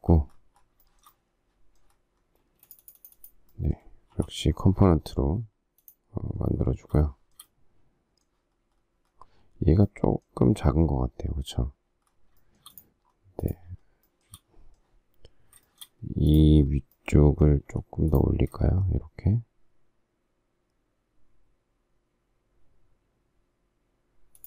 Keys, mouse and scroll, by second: 0.9 shift+middle click, 2.5 space, 4.2 g, 7.0 shift+middle click, 12.4 shift+middle click, 13.8 shift+scroll up 1, 14.1 shift+middle click, 15.6 shift+middle click, 17.7 m, 24.3 shift+click.